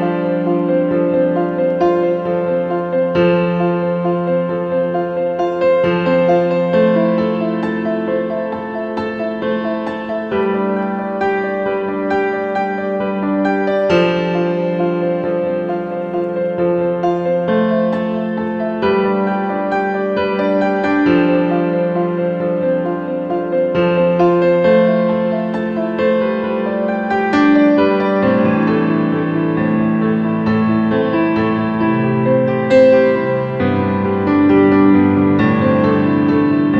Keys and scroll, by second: 22.1 ctrl+z.